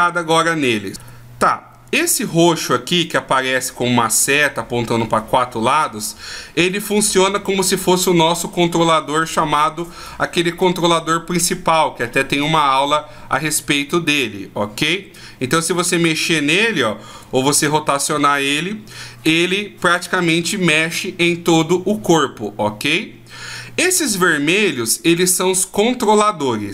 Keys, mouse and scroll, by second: 2.3 right click, 3.0 right click, 3.7 right click, 6.1 right click, 23.6-24.4 scroll up 1, 24.4 scroll up 1, 25.4 right click.